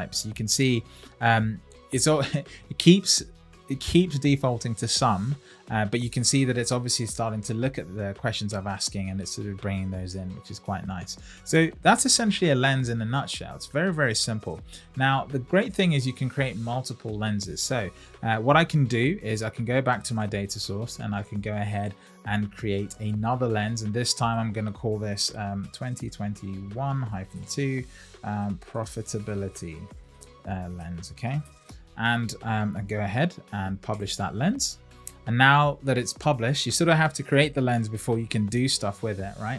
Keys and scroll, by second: 28.4 shift+p.